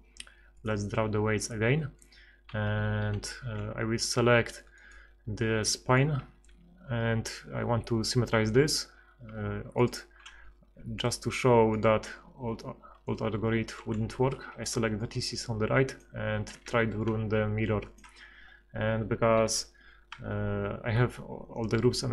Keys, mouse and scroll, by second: 2.8 a, 3.1 KP_1, 4.9-6.0 drag, 14.1 a, 14.7 b, 16.5 ctrl+x, 19.5 F6.